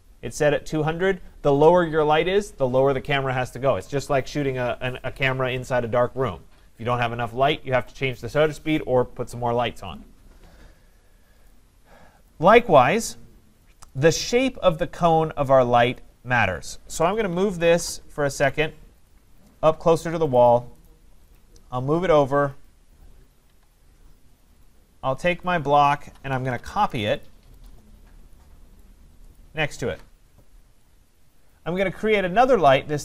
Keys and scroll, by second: 17.7 Return, 23.5 Escape, 26.7 Return, 29.8 Escape.